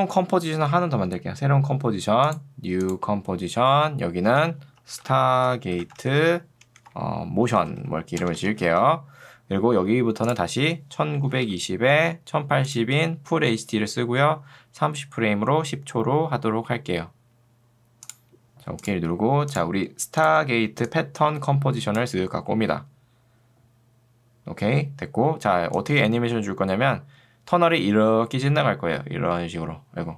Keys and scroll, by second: 3.9-9.2 typing, 10.7-11.6 typing.